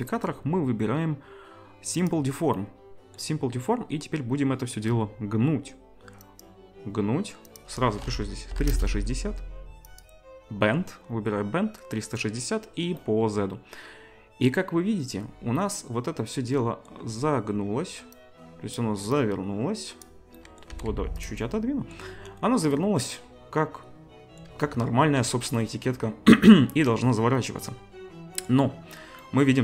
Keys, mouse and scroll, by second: 6.4-7.4 drag, 10.0-18.2 drag, 18.8 click, 20.7 g, 21.3-23.8 drag, 23.8-25.6 middle drag, 23.8-29.6 right drag, 26.3-29.6 middle drag.